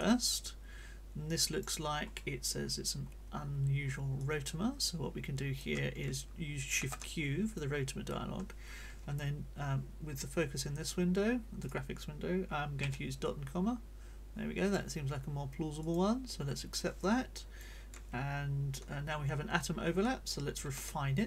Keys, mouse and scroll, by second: 3.1-3.5 scroll up 2, 3.8-4.1 scroll up 2, 4.1-5.7 drag, 6.7 shift+q, 7.5 click, 11.6 click, 13.1 ., 13.2-14.9 drag, 15.8 click, 16.9 click, 20.6 shift+r.